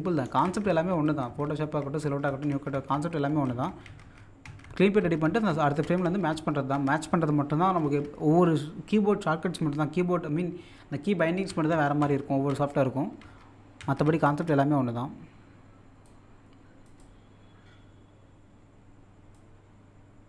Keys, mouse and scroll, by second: 0.2 Left, 16.0-20.2 drag.